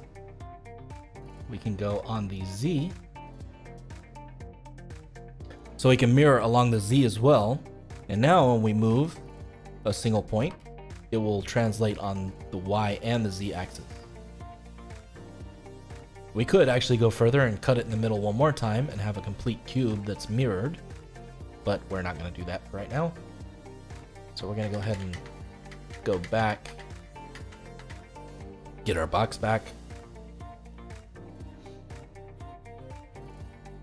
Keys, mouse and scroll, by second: 1.1 click, 2.3 click, 2.8 click, 3.6 click, 6.3-8.3 middle drag, 8.3 click, 8.8 click, 9.4-10.4 middle drag, 10.4 g, 15.5-24.5 middle drag, 24.5 ctrl+z, 24.7 ctrl+z, 24.9 ctrl+z, 25.2 ctrl+z, 25.4 ctrl+z, 25.5 ctrl+z, 25.8 ctrl+z, 26.1 ctrl+z, 26.3 ctrl+z, 26.6 ctrl+z, 26.9 ctrl+z, 27.2 ctrl+z, 27.4 ctrl+z, 27.7 ctrl+z, 30.5 click, 31.2-33.8 middle drag.